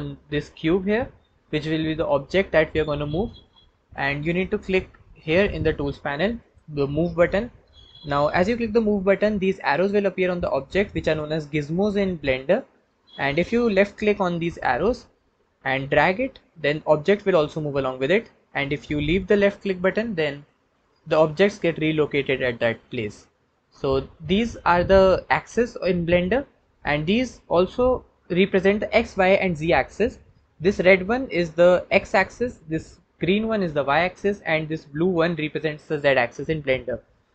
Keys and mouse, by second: 0.2-11.0 drag, 14.1 click.